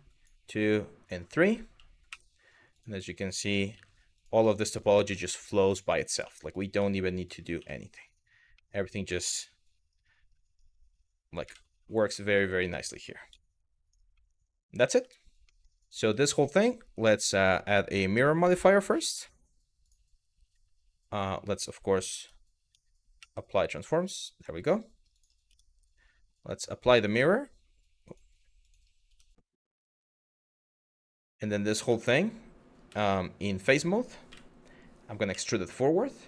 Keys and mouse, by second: 0.2 click, 1.7 w, 2.4 click, 3.4 f, 3.8 click, 4.4 shift+click, 4.7 f, 5.0 click, 5.5 shift+click, 6.2 click, 8.3 middle click, 8.8 middle click, 11.1 KP_Decimal, 11.7 middle click, 13.0 z, 13.9 middle click, 14.7 Tab, 15.2 middle click, 15.5 click, 15.6 Tab, 16.2 middle click, 17.0-19.5 drag, 21.8 Tab, 22.8 ctrl+a, 23.9 middle drag, 24.3 click, 24.8 click, 25.1 Tab, 26.2 click, 26.6-27.7 drag, 28.2 click, 28.7 Tab, 29.5-30.0 drag, 30.7 Tab, 31.1 middle click, 33.2 3, 33.9 a, 34.9 e.